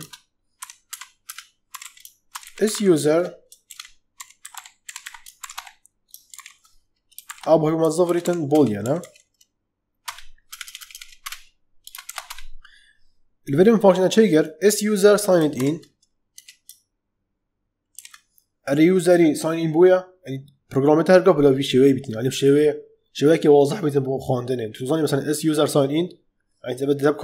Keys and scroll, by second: 0.0-10.4 typing, 9.9 Return, 11.7 space, 11.9 shift+[, 12.1 Return, 15.5 shift+i, 16.3 BackSpace, 17.9 shift+u.